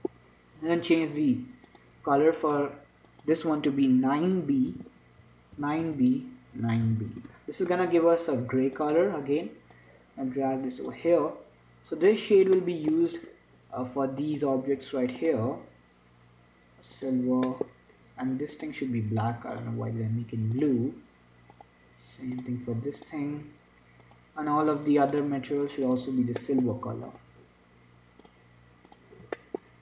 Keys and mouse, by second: 0.1-2.0 middle drag, 2.0-7.1 drag, 9.0-11.9 drag, 12.8-16.3 middle drag, 16.3-17.4 drag, 17.4 middle click, 19.0-20.6 middle drag, 20.6-21.6 drag, 21.6 middle click, 21.8 click, 23.6-27.4 drag, 23.6 middle click, 23.6-26.0 right drag, 27.4-29.3 right drag, 28.5-29.8 drag.